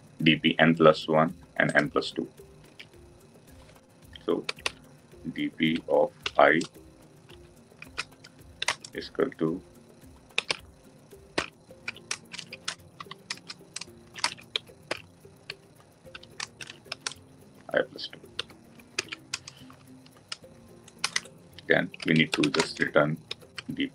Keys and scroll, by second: 18.9 ctrl+alt+l.